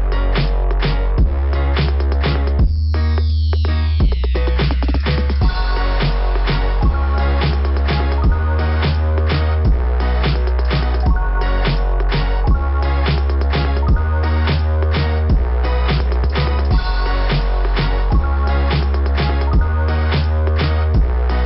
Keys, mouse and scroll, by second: 2.7 click, 2.7 [, 2.9 click, 3.1 [, 3.1 click, 6.5 click, 7.4 click, 9.3 click, 9.4 click, 9.8 click, 17.2 click, 18.1 click, 20.4 click.